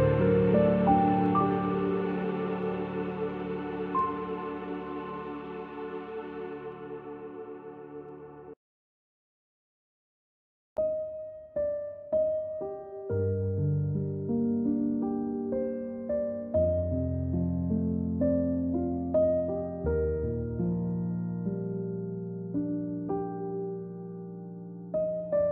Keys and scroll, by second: 2.7 a, 7.7 z, 8.8 space, 10.0 space, 11.1 space, 11.8 v, 14.3 a, 24.4 z, 25.4 space.